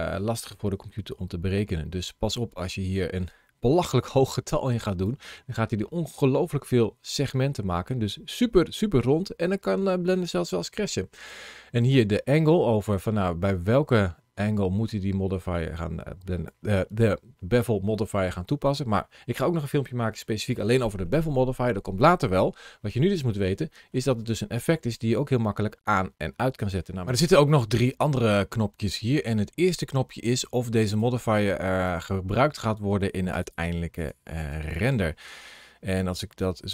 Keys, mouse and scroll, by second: 5.9 middle click, 7.6 middle click, 13.8 click, 21.8 middle click, 36.2 click.